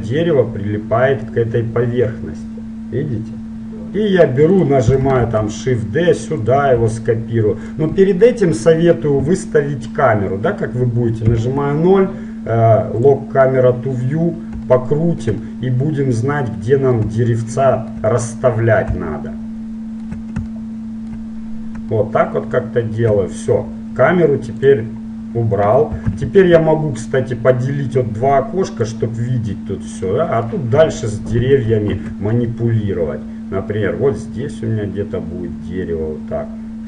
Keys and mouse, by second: 5.4 shift+d, 7.0 s, 8.2-10.1 middle drag, 11.4 KP_0, 13.1-15.0 drag, 15.0-24.8 middle drag, 24.8-26.3 drag, 26.1 t, 26.3 n, 27.7-29.5 drag, 30.7-32.1 middle drag, 32.1 shift+d.